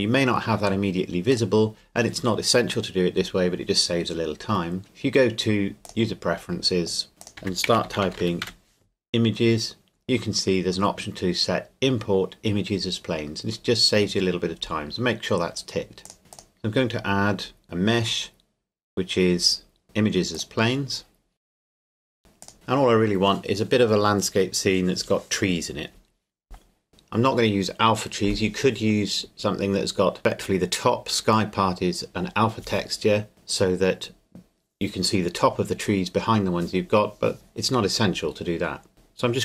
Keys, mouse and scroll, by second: 1.3 click, 5.9 click, 7.2 click, 7.4-8.4 typing, 16.1 click, 16.2 shift+a, 16.3 click, 20.3 click, 22.4 click.